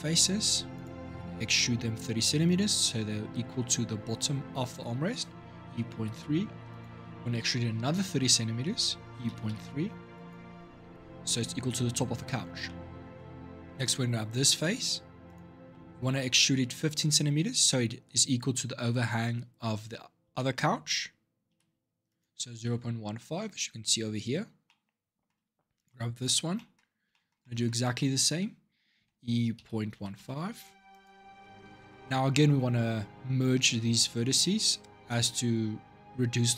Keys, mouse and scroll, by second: 0.5 click, 0.9 shift+middle click, 1.5 scroll up 2, 5.4 e, 8.8 e, 12.4 middle click, 13.1-13.6 scroll down 3, 13.6 click, 15.0 click, 15.5 shift+middle click, 15.8-17.1 scroll up 6, 19.4 e, 22.4-24.4 scroll down 3, 24.4-25.5 middle drag, 25.5 click, 26.0 shift+click, 26.3-28.8 middle drag, 28.8 e, 31.2 middle click, 31.9-32.3 shift+scroll down 1, 34.9-36.5 middle drag.